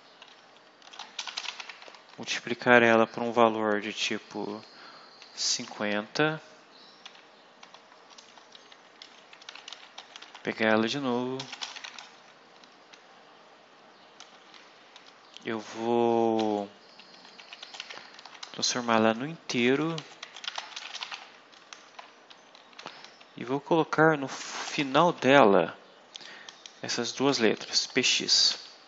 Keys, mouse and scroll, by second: 0.0-2.2 typing, 4.9-5.8 typing, 7.5 ;, 8.1 Return, 8.6 Up, 9.0 Down, 9.1-12.8 typing, 14.2 space, 16.5-23.1 typing, 24.6 BackSpace, 25.0 shift+', 26.8 p, 27.2 x, 27.6 Right.